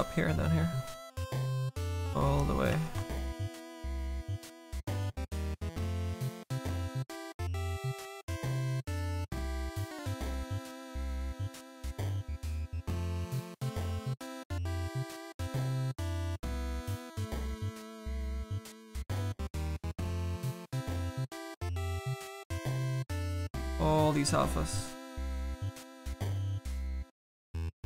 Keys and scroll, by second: 2.7 s, 10.9 s.